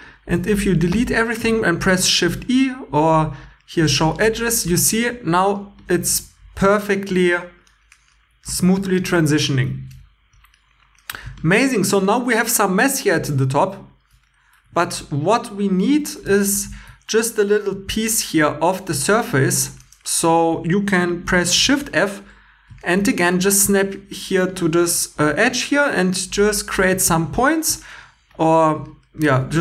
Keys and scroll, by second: 0.3 x, 0.7 x, 1.2 shift+e, 16.5 shift+e, 21.6 shift+f, 29.2 1.